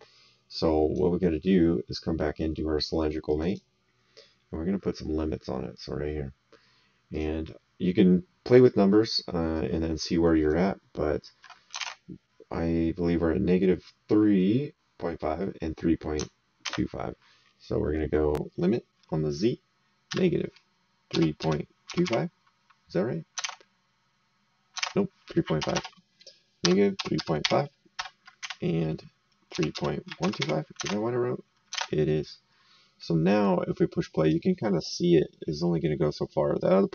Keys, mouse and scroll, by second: 3.3 click, 5.7 click, 7.1 click, 9.5 right click, 11.8 alt+Tab, 16.6 alt+Tab, 20.0 KP_Subtract, 21.1 KP_3, 21.4 KP_Decimal, 21.9 KP_2, 22.0 KP_5, 23.4 alt+Tab, 24.8 alt+Tab, 25.6 BackSpace, 26.6 KP_Subtract, 26.9 KP_3, 27.1 KP_Decimal, 27.4 KP_5, 27.9 KP_Enter, 28.4 Tab, 29.5-30.4 typing, 30.8 alt+Tab, 31.7 alt+Tab, 34.2 click.